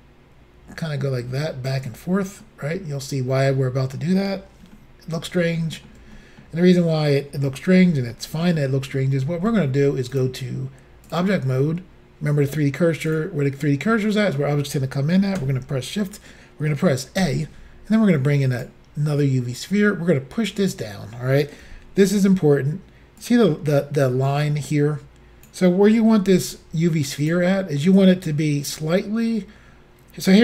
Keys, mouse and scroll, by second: 2.5 middle click, 4.8 shift+middle click, 5.6 ctrl+middle click, 6.2 middle click, 7.6 middle click, 7.8 middle click, 8.2 shift+middle click, 10.2 click, 11.1 click, 13.1 click, 17.2 a, 18.6 click, 19.7 click, 21.7 s, 23.2 click, 24.5 click, 26.2 s, 27.2 click, 28.0 click.